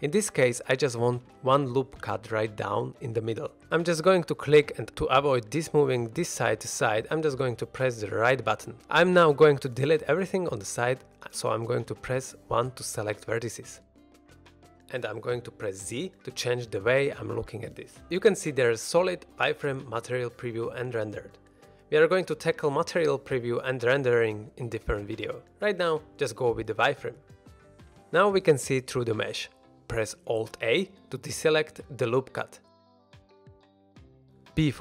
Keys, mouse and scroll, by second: 0.6 ctrl+r, 7.8 right click, 8.0 right click, 8.3 middle click, 11.5-12.0 middle drag, 11.5 1, 12.9 1, 14.5 shift+middle drag, 14.8 middle click, 16.4 z, 30.7 middle click, 32.1 alt+a, 34.7 b.